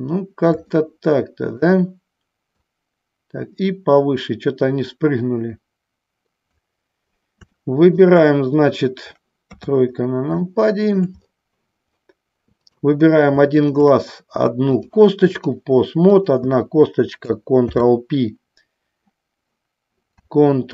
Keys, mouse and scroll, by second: 0.8 shift+middle click, 2.7-6.7 drag, 7.8 shift+middle click, 9.6 KP_3, 10.6 shift+middle click, 12.7 click, 14.9 click, 18.4 ctrl+p.